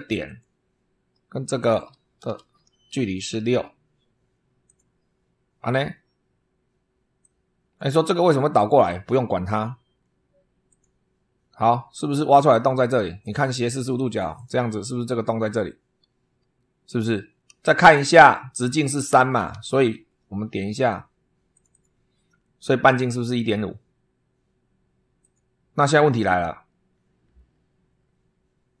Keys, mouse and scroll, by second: 0.2 click, 1.5 click, 2.3 shift+v, 3.4 6, 4.6 click, 7.1 click, 8.4 click, 10.6 click, 13.2 click, 14.3 click, 19.4 super+3, 21.4 click, 22.6 scroll up 2, 25.1 click.